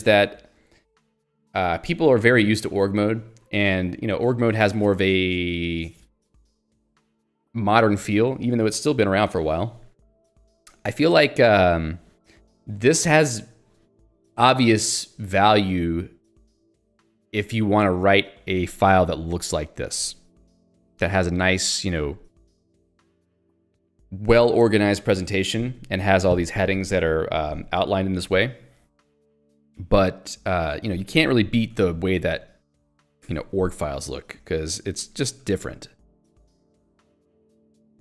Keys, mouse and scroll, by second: 19.2 Escape, 19.9 click, 20.5 Escape, 21.2 k, 26.9 j, 31.8 ctrl+alt+j, 32.7 Escape, 34.7 o, 35.0 g, 35.6 ctrl+g, 36.1 Escape.